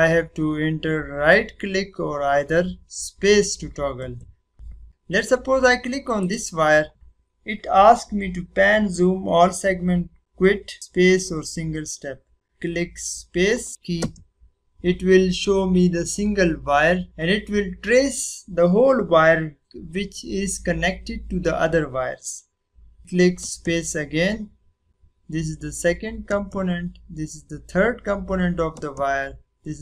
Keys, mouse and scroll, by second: 4.8 click, 6.9 click, 13.9 space, 23.3 space, 26.3 space.